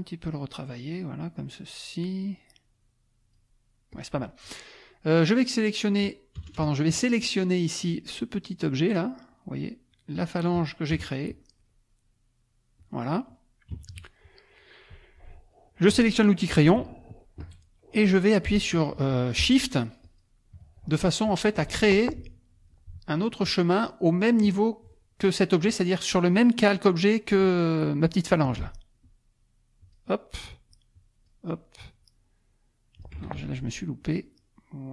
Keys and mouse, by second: 0.2 click, 1.5 click, 2.8 click, 3.9 click, 6.4 KP_Add, 7.0 click, 8.7 click, 9.3 click, 9.9 click, 10.9 KP_Add, 11.4 click, 12.8 click, 13.7 KP_Subtract, 14.4 click, 15.5 click, 16.7 p, 17.2 click, 20.0 shift+click, 21.8 ctrl+shift+z, 29.0 shift+click, 30.7 shift+click, 32.0-33.2 shift+drag, 33.2 ctrl+shift+z, 34.0-34.9 shift+drag.